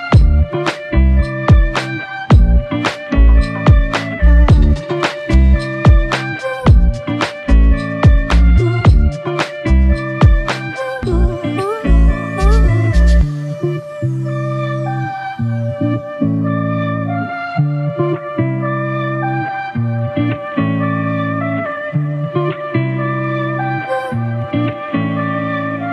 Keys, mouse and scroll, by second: 13.5 ctrl+click, 16.0 ctrl+click, 18.6 alt+click, 22.3 ctrl+click.